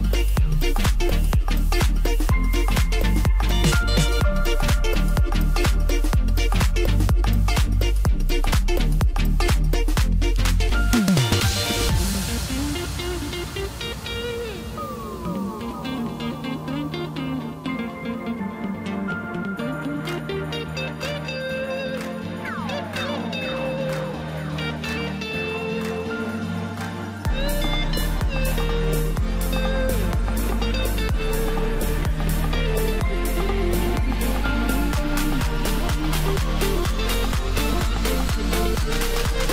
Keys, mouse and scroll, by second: 0.0 click, 0.9 s, 3.6 e, 4.8 s, 6.8 KP_1, 7.9-9.0 middle drag, 9.0 click, 9.8 s, 11.2 KP_1, 12.6-13.6 scroll down 2, 13.6 ctrl+r, 17.5 Tab, 18.0-18.3 scroll up 1, 18.3-18.6 scroll down 1, 18.6-20.7 middle drag, 20.7 KP_1, 22.2-25.3 drag, 27.4 click, 28.2-31.2 drag, 32.0 s, 34.0 Tab, 36.7 click, 39.0 click.